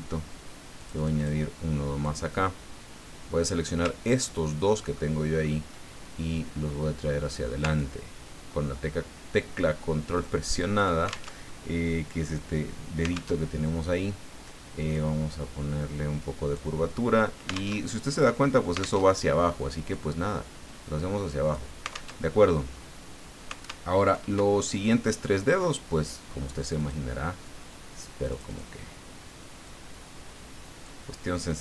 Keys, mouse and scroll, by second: 0.8 click, 2.0-3.6 drag, 4.0-4.8 ctrl+scroll down 2, 4.9 ctrl+click, 7.8-11.0 ctrl+drag, 11.3 ctrl+alt+Tab, 13.3 alt+Tab, 14.9-16.7 drag, 17.8 alt+Tab, 19.0 alt+Tab, 19.9-21.6 drag, 22.1 alt+Tab, 23.9 alt+Tab, 26.6 click, 28.3 click, 29.6-31.0 drag, 31.5-31.6 drag.